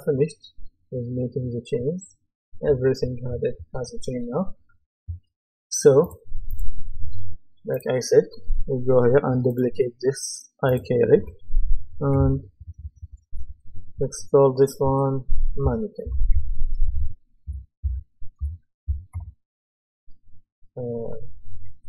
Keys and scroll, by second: 12.1 Right, 12.6 BackSpace, 15.7-19.6 typing.